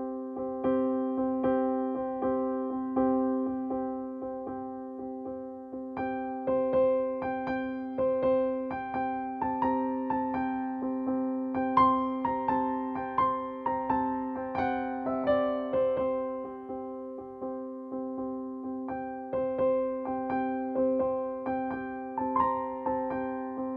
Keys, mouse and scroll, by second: 1.0 typing, 7.6 shift+click, 13.1 click, 18.3 ctrl+space, 19.0 ctrl+space, 20.0 click, 22.1-23.7 alt+drag.